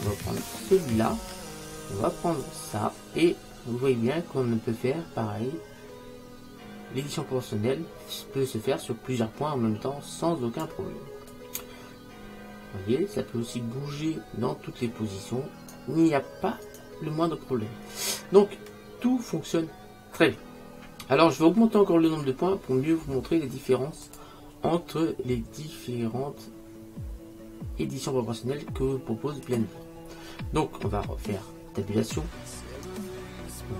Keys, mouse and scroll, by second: 2.5 click, 11.4-13.1 right drag, 17.6-19.4 middle drag, 24.1 click, 31.9 Tab.